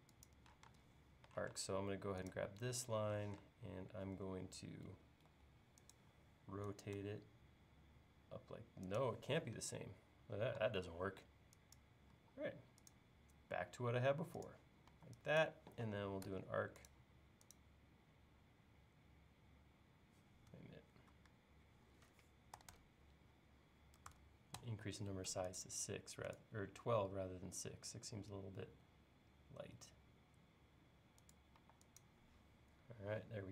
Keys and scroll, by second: 1.5 space, 3.2 q, 4.9 Up, 5.3 Right, 10.9 e, 12.1 l, 15.0 e, 16.3 a, 20.6 Escape, 22.4-24.6 typing, 31.6 e.